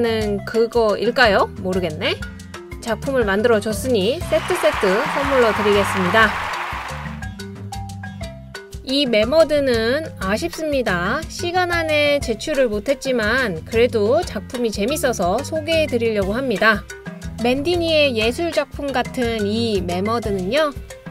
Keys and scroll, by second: 15.5 t, 17.2 Left, 17.6 Down, 17.8 Down, 17.9 Down, 18.0 Down.